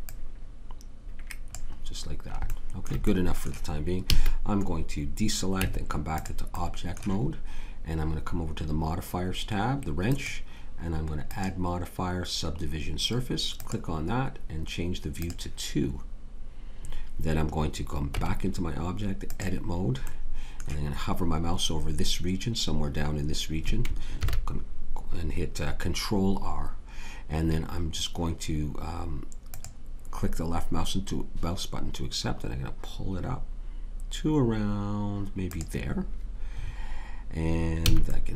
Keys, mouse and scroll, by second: 4.1 a, 5.6 Tab, 18.1 Tab, 24.2 ctrl+r, 37.9 a.